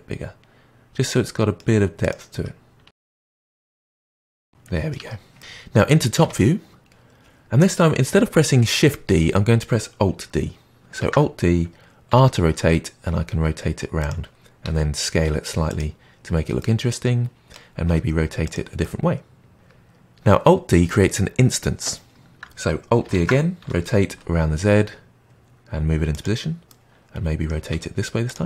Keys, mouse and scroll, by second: 2.0 click, 2.8 r, 3.4 middle click, 3.9 click, 4.0 r, 4.3 middle click, 4.9 Tab, 5.3 middle click, 6.2 KP_7, 11.0 alt+d, 14.6 s, 16.5-17.8 middle drag, 17.8 r, 18.8-20.5 middle drag, 23.1 alt+d, 26.6-27.6 middle drag, 27.6 r.